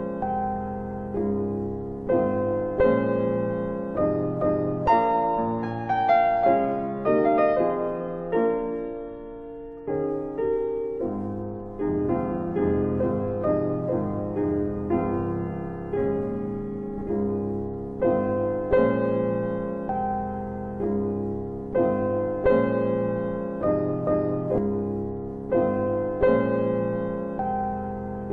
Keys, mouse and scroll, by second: 0.6 click, 3.1 click, 5.2 alt+click, 5.4 alt+click, 5.8 alt+middle click, 6.0 alt+middle click, 6.3 alt+right click, 6.5 alt+right click, 6.8 alt+click, 6.9 alt+click, 7.3 alt+middle click, 7.6 alt+middle click, 7.6 alt+right click, 7.9 alt+right click, 8.2 alt+click, 8.4 alt+click, 8.8 alt+middle click, 9.1 alt+right click, 9.7 alt+right click, 11.3 alt+right click, 13.5 ctrl+d, 16.9 _, 18.8-20.3 typing, 22.7 click, 23.4 click, 23.8 click, 24.4 BackSpace.